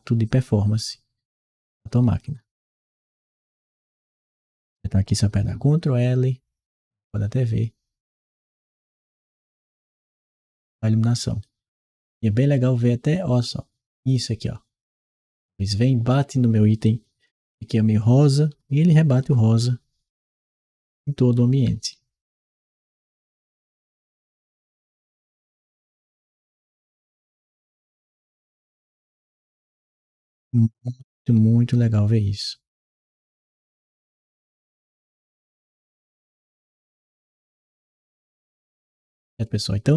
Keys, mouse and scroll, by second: 1.3-4.2 right drag, 8.9-11.2 ctrl+right drag, 16.7-19.0 ctrl+right drag, 17.1 w, 18.3 d, 20.0-32.2 right drag, 20.8 d, 21.5 w, 21.8 d, 23.2 d, 23.5 s, 25.5 s, 27.4 s, 29.1 a, 30.7 s.